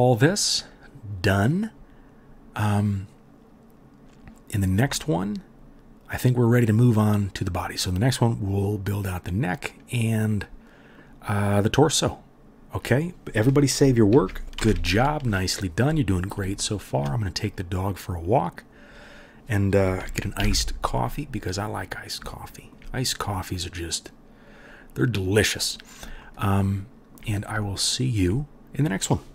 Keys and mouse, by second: 14.1 ctrl+s, 14.5 KP_1, 18.1-29.3 middle drag, 18.1-20.5 right drag, 20.3 KP_3, 27.8 shift+click, 27.8 shift+right click, 28.1 shift+click, 28.1 shift+right click.